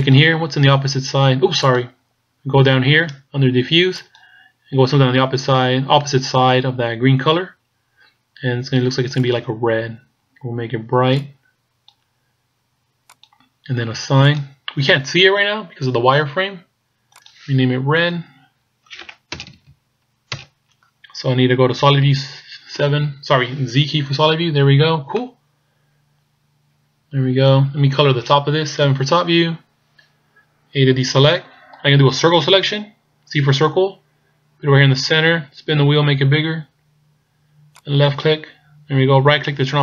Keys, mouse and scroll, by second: 0.1 click, 4.1 click, 14.3 click, 17.2 click, 22.1 z, 25.2 middle click, 28.9 KP_7, 29.7-30.7 scroll up 4, 31.0 a, 33.5 c.